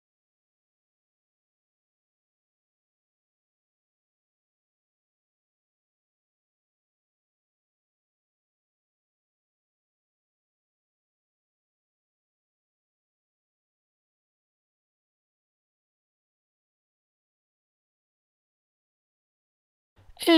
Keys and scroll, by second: 0.0-0.2 typing, 1.1 super+a, 1.5 alt+super+r, 2.8 alt+super+t, 3.4 alt+shift+super+t, 4.8 4, 4.9 Tab, 4.9 4, 5.0 Tab, 5.5 4, 5.8 super+h, 6.0 super+h, 6.4 super+space, 6.5 super+space, 6.7 super+space, 7.7 super+-, 7.8 super+-, 8.3-9.8 typing, 10.2 Tab, 11.9 Tab, 13.2 alt+super+g, 14.1 shift+super+a, 15.8 |, 16.3 alt+shift+space, 18.4 super+z.